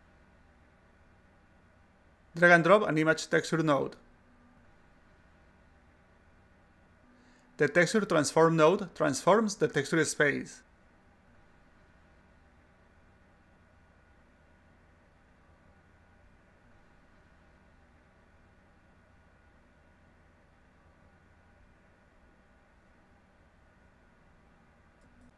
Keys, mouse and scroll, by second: 4.3-5.8 drag, 6.9-10.4 drag, 11.7 click, 12.9 click, 13.6 click, 15.0 click, 16.1 click, 17.4 click, 18.9 click, 20.1-21.5 drag, 21.7 click, 22.7-24.7 drag.